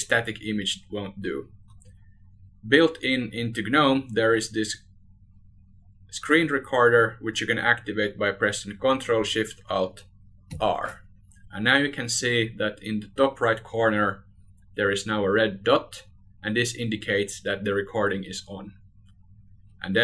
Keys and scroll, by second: 1.2 ctrl+alt+shift+r.